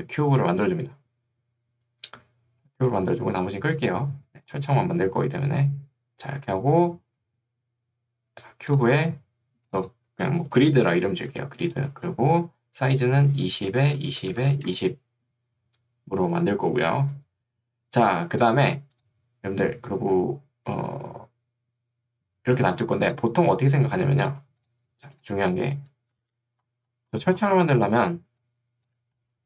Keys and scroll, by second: 10.4-11.4 typing, 11.7 Return, 13.5 2, 13.7 Tab, 13.9 2, 14.7 Return, 24.1 2, 26.3 b, 28.3 3.